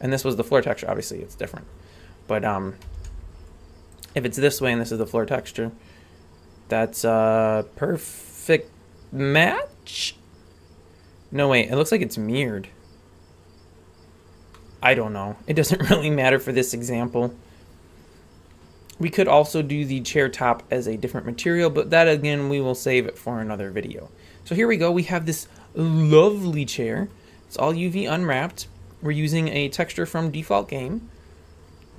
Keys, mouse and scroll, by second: 2.8 r, 14.5-19.1 middle drag, 19.4-21.3 right drag, 21.3 scroll up 1, 21.4-27.0 middle drag.